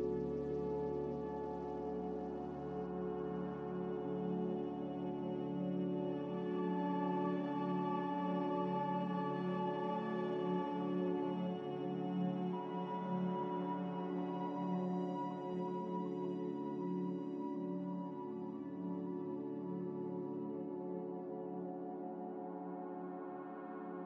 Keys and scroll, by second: 0.9 1, 11.1 z.